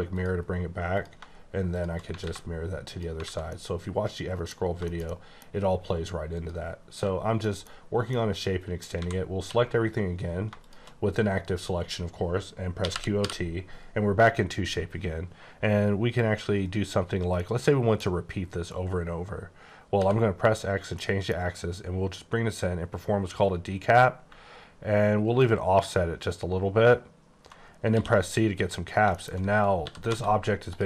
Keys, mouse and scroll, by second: 0.5 scroll down 2, 0.9 click, 2.2 x, 3.1 alt+click, 3.2 a, 3.4 middle click, 5.1 shift+double middle click, 5.4-5.7 scroll down 1, 6.3 click, 6.9 h, 7.3 middle click, 8.0 middle click, 8.1 middle click, 8.9-9.3 typing, 10.6 click, 12.8-13.1 typing, 15.0-16.9 scroll down 1, 17.4 middle click, 19.9 x, 21.0 middle click, 24.3 middle click, 28.6 click, 28.9 scroll down 1, 29.1 shift+middle click, 29.6 scroll down 1, 29.8 typing, 30.7 click.